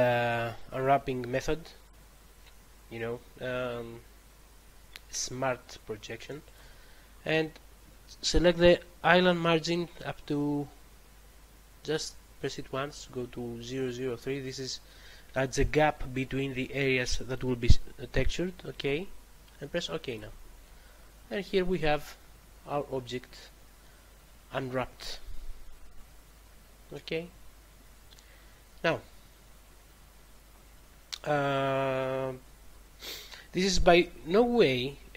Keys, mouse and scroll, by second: 6.4 click, 11.9 click, 20.0 click.